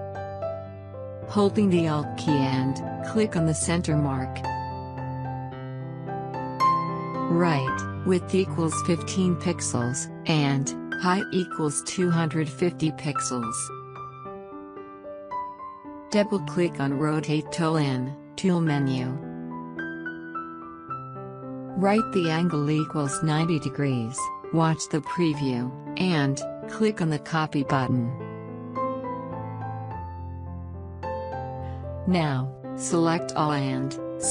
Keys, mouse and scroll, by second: 2.0 click, 5.2 click, 5.3 alt+click, 9.0-9.4 typing, 10.9 Tab, 12.3-13.1 typing, 14.3 0, 15.5 click, 19.3 click, 23.8 click, 28.8 click, 32.9 alt+scroll up 1, 33.4 alt+scroll up 1, 33.7 space, 33.8-34.3 drag.